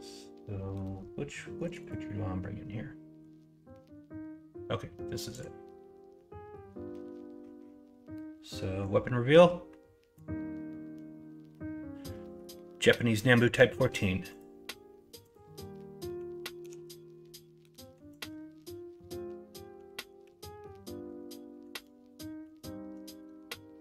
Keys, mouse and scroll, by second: 16.6 s, 20.2 g, 22.1 d.